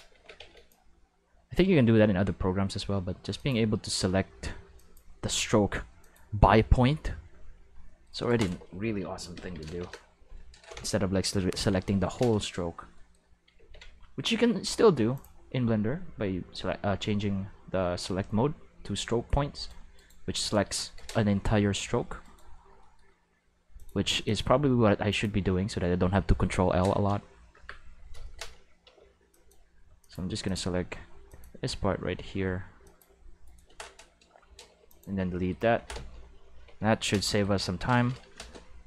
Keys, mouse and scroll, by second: 0.1 alt+a, 0.3 c, 0.7-1.5 drag, 3.3 click, 4.7 click, 6.0 click, 8.1 right click, 9.3 ctrl+l, 9.6 x, 11.5 ctrl+v, 13.5 ctrl+s, 15.1 click, 19.5 right click, 19.9 right click, 21.3 g, 22.2 right click, 23.7 click, 24.2 click, 25.1 click, 28.3-28.8 middle drag, 28.8 c, 29.3 click, 30.0 click, 30.4 click, 31.2 click, 32.8 click, 33.4 right click, 34.6 x, 34.8 click, 36.5 ctrl+v.